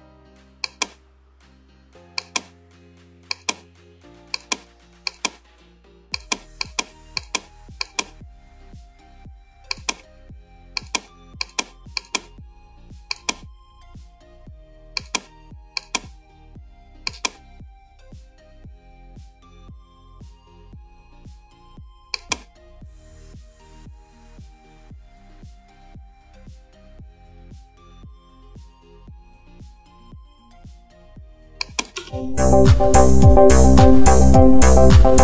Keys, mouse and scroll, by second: 2.3-10.9 click, 28.6-32.1 drag, 32.1 space.